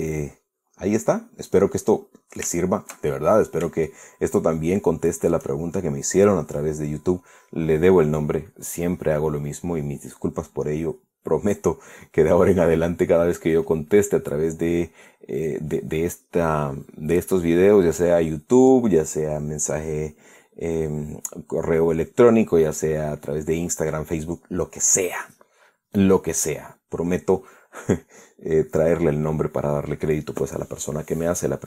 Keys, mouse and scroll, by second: 3.8-4.2 shift+scroll up 1, 4.5-6.2 shift+middle drag.